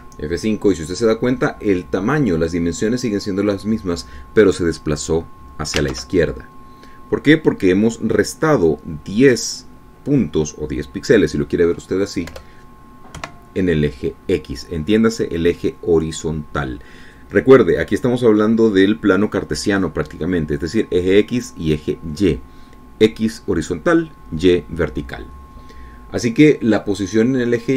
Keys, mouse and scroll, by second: 0.3 ctrl+alt+Tab, 1.2 F5, 7.3 alt+Tab, 13.7 BackSpace, 14.5 KP_2.